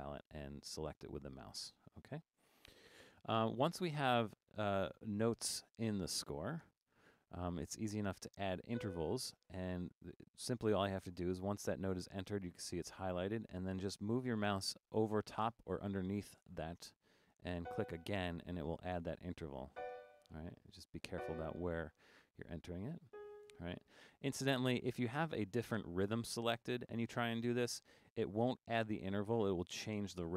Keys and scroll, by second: 7.1 5, 25.5 4.